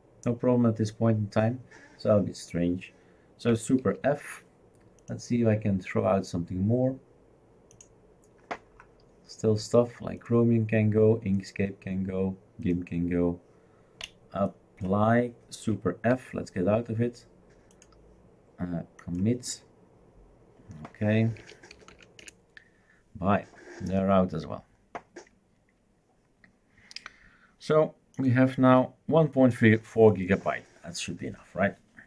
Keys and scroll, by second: 3.8 super+f, 16.1 super+f, 21.1-22.4 typing.